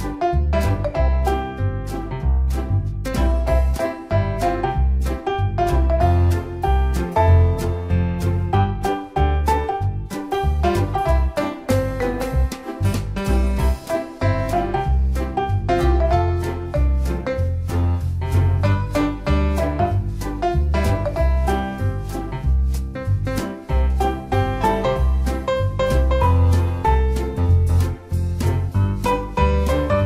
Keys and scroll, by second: 15.0 ctrl+d, 17.4 Return.